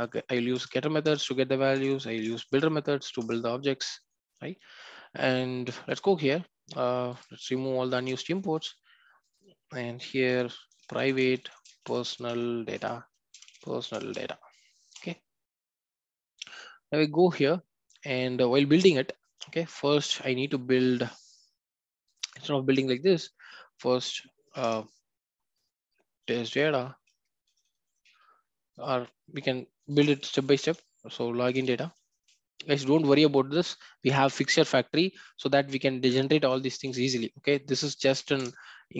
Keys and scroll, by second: 0.5 Return, 3.2 Return, 7.9 ctrl+alt+o, 12.7 Return, 32.1 Return, 38.3 Return.